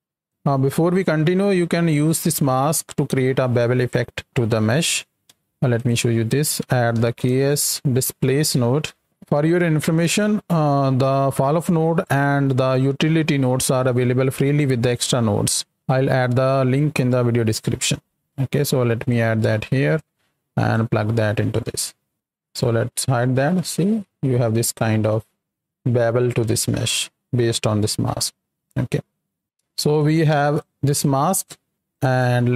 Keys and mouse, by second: 0.2-5.3 drag, 5.4 shift+a, 9.0 Down, 9.7 shift+a, 18.2 click, 19.9-20.7 drag, 21.5-22.1 middle drag, 22.4 ctrl+click, 23.1-27.5 middle drag, 28.5 middle click, 29.4 ctrl+x, 29.9-30.2 ctrl+shift+drag, 30.5 ctrl+shift+click, 31.3 click, 31.9 click, 32.2 x.